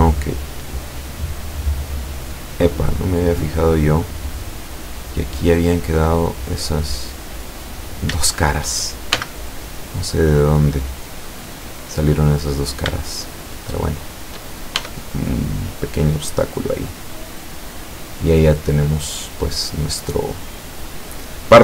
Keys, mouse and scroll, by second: 1.4-1.8 scroll up 2, 1.9-5.2 middle drag, 5.9 scroll down 2, 6.7-7.5 middle drag, 7.8 right click, 8.4 shift+right click, 9.2 x, 10.0 click, 10.6-11.3 middle drag, 12.7 shift+right click, 13.2 shift+right click, 13.9 shift+right click, 14.8 shift+e, 16.0 click, 16.4-20.1 middle drag, 20.2-20.9 middle drag.